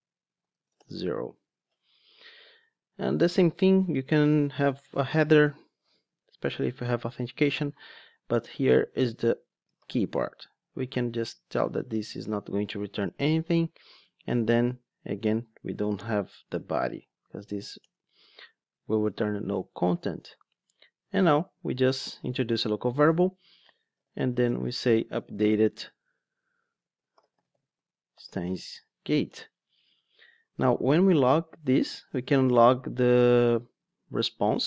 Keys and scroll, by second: 6.3 super+1, 11.2 Return, 21.4 alt+Return, 31.2 super+c.